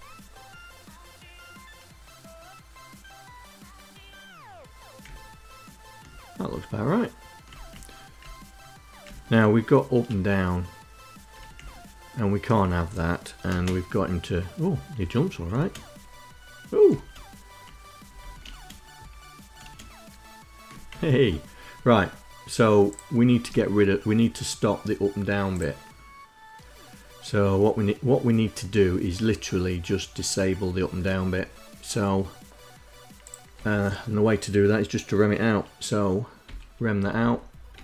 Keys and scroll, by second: 4.7 Right, 6.1 Left, 7.1 Right, 7.7 Up, 8.6 Down, 9.7 Up, 11.1 Down, 13.0 space, 14.5 Right, 15.1 space, 16.4 space, 17.8 Left, 18.0 space, 19.2 space, 20.5 Right, 33.1 Left, 36.0 ', 36.5 Down, 36.8 Left, 37.3 #, 37.7 Down.